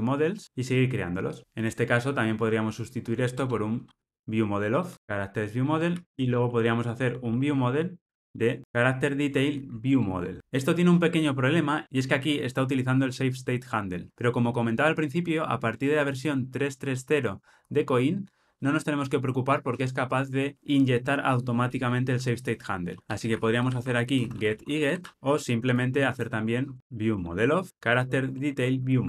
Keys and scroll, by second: 3.3 alt+Return, 4.9 Tab, 5.9 ctrl+alt+o, 9.9 Return, 10.4 super+p, 27.7 Tab, 28.8 ctrl+alt+o.